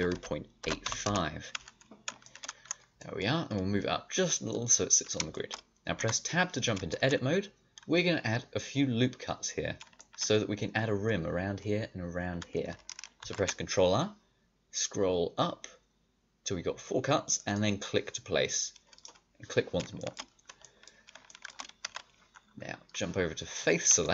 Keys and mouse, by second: 1.8 click, 2.1-3.8 middle drag, 3.8-5.9 drag, 5.9 Tab, 13.1 ctrl+r, 21.8 a.